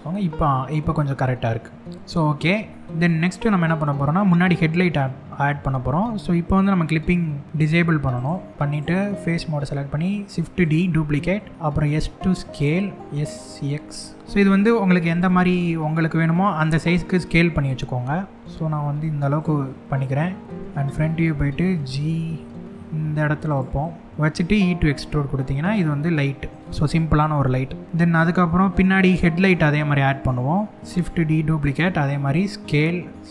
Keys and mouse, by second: 2.3 middle click, 4.1 middle click, 7.8 click, 9.3 shift+d, 10.2 right click, 11.5 s, 12.3 click, 13.0 s, 14.0 click, 14.0 x, 14.2 s, 14.2 z, 14.7 click, 15.2 s, 17.7 x, 19.2 middle click, 20.5 KP_1, 21.3 g, 23.1 click, 23.4 middle click, 26.1 click, 27.1 ctrl+KP_Add, 28.1 middle click, 29.6 middle click, 30.6 shift+click, 30.7 shift+d, 31.3 right click, 31.8 s, 32.9 click, 33.1 s.